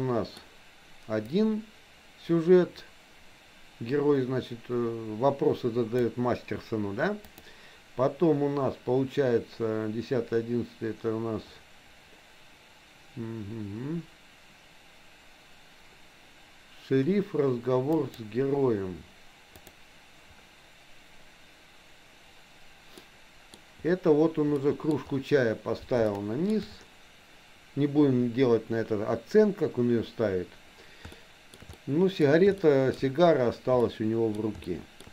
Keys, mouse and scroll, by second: 1.3-6.2 drag, 7.2-21.4 drag, 23.1 middle click, 24.7 middle click, 26.1 shift+middle click, 31.2 shift+middle click, 31.7 middle click, 32.6 shift+middle click, 33.9 middle click, 34.7 shift+middle click.